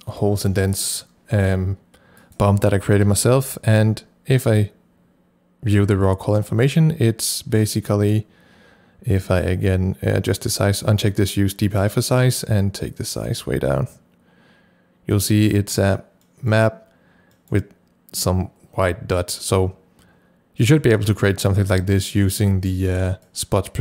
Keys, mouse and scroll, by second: 3.1 c, 4.4 click, 9.5-16.1 drag, 9.9 c, 15.9 scroll down 1, 16.2 middle click, 17.4 middle click, 19.5 scroll up 1, 20.6 middle click, 21.2 middle click, 21.8 middle click, 22.4-22.8 scroll up 1, 22.8 middle click.